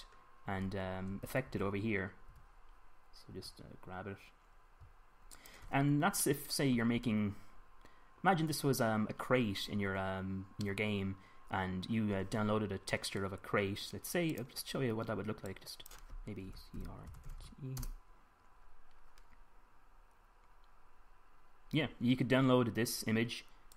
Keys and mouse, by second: 2.0 a, 2.3 a, 3.1 g, 4.1 g, 7.0 middle click, 11.6 middle click.